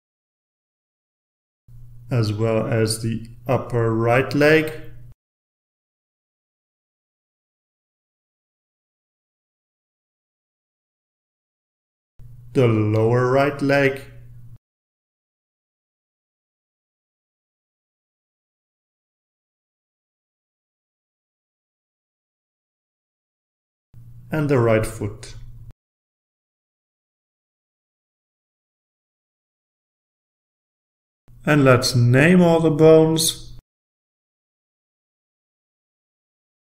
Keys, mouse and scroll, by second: 0.2-0.8 scroll up 1, 1.9 click, 2.4 right click, 4.1 click, 5.5-7.5 drag, 7.5-8.1 scroll down 2, 8.9-11.4 drag, 11.5 right click, 12.9 click, 13.4-14.2 scroll down 1, 15.0-19.8 drag, 20.4-22.8 drag, 23.1 right click, 24.3 click, 24.8-25.6 scroll down 1, 25.9-27.7 drag, 28.2-30.3 drag, 30.5-31.4 scroll up 1, 31.4 scroll down 1, 31.5-31.9 scroll up 2, 31.9 click, 32.0-32.9 typing, 32.8 click, 33.1 scroll down 2, 33.1 scroll up 2, 33.2 scroll down 2, 33.5 click, 33.7 scroll up 1, 33.8 click, 33.9 click, 34.1 click, 34.4 click, 34.7 click, 35.1 click, 35.6 click, 35.9 click, 35.9-36.7 typing.